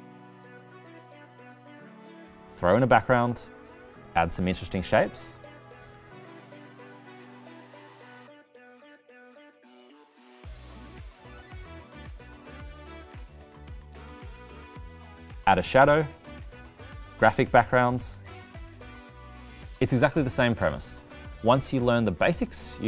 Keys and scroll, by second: 4.4 r.